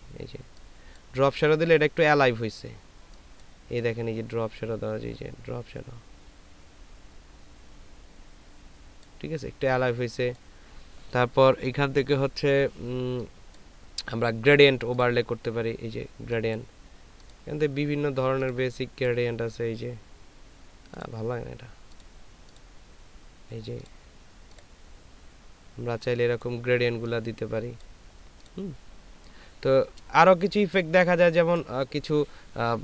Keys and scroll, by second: 30.6 ctrl+space.